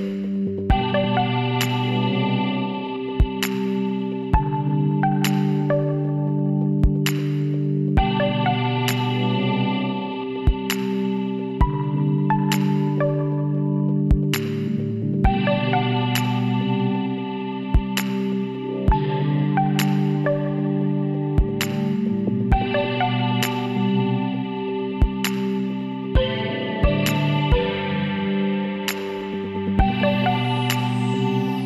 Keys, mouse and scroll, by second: 2.7-4.2 middle drag, 4.2 click, 4.4 Tab, 4.9 middle click, 8.2 middle click, 12.6-14.2 middle drag, 14.9-17.8 right drag, 17.9 shift+d, 19.7-21.5 drag, 21.8-23.5 middle drag, 23.5 KP_1, 24.0-26.4 middle drag, 28.0-29.8 middle drag, 29.9 g.